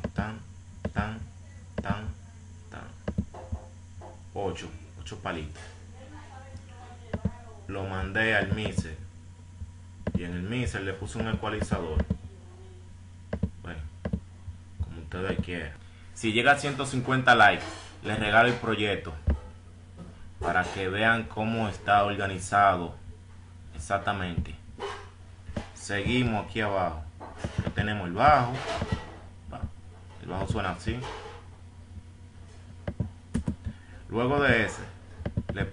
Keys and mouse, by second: 9.2 F1, 9.7 F1, 14.9 F6, 28.0 F1, 28.0 click, 29.5 click, 33.6 click, 35.6 F1, 35.6 click.